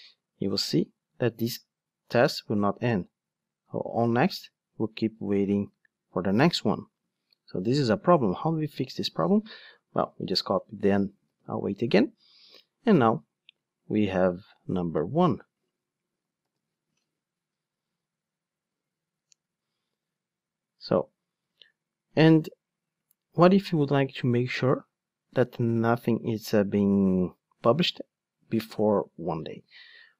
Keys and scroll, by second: 8.1 super+F2, 9.9 super+c, 11.3 super+v, 16.4 ctrl+shift+d.